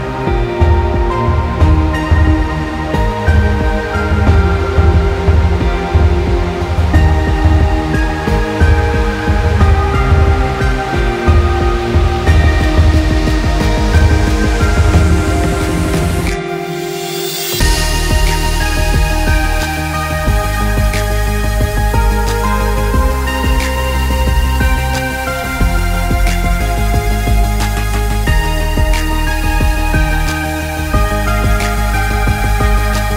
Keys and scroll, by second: 31.4 ctrl+z.